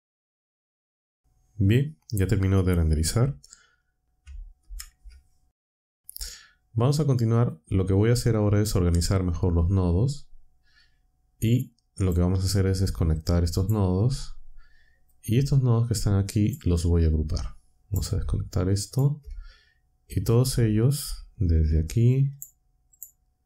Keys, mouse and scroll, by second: 4.5 Down, 9.9-12.2 drag, 13.0-13.8 ctrl+drag, 15.0-16.6 drag, 17.4-18.1 drag, 18.6 ctrl+click, 20.3 click, 22.3 shift+click, 22.9 shift+click.